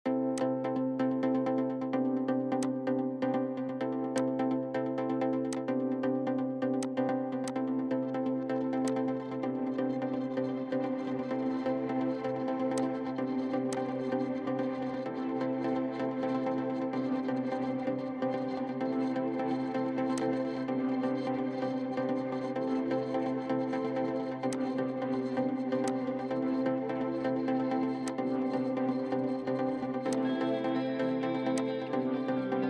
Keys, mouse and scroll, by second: 1.9 Escape, 2.1 Escape, 4.2 ctrl+click, 5.5 ctrl+click, 10.2 middle click, 14.7 middle click, 17.9 scroll up 1, 18.8-20.2 scroll down 1, 22.7-23.1 scroll up 1, 26.4-28.4 scroll down 1, 30.2 ctrl+click, 32.2-32.6 scroll down 1.